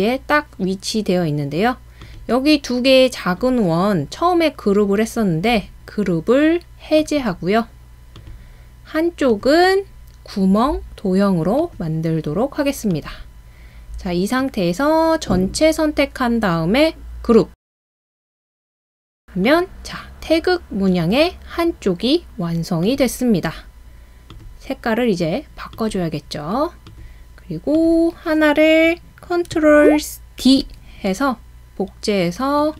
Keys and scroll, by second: 30.4 super+d.